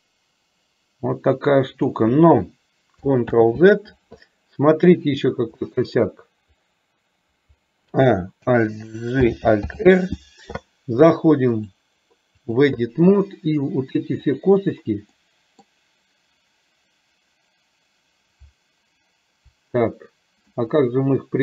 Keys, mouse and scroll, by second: 3.5 ctrl+z, 5.7 middle click, 8.0 a, 9.3 alt+g, 9.8 alt+r, 11.6-12.7 drag, 14.5 click, 15.2 middle click, 20.7-21.4 middle drag.